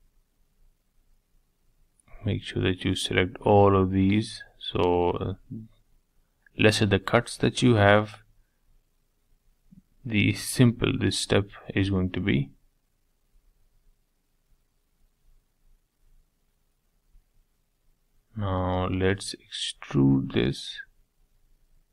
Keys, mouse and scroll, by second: 0.2 shift+click, 0.9 shift+click, 2.8 shift+click, 3.4 shift+middle click, 3.7 scroll down 2, 4.0-5.3 middle drag, 5.3 shift+click, 5.6-8.2 middle drag, 8.2 shift+click, 9.2 shift+click, 10.2 shift+click, 10.5-11.9 middle drag, 11.9 shift+click, 12.4 shift+click, 12.7-13.8 middle drag, 13.8 shift+click, 14.4 shift+click, 14.9 scroll down 1, 15.0-16.1 middle drag, 16.1 scroll down 1, 16.4 middle click, 16.8 scroll down 1, 17.0-18.2 shift+middle drag, 18.2 g, 21.2-21.9 middle drag.